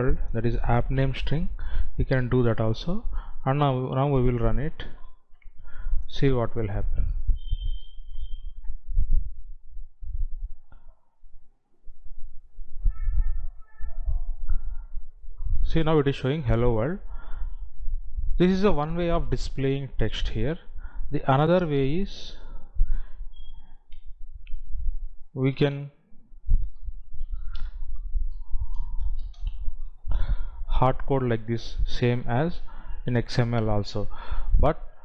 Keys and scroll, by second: 29.7 space.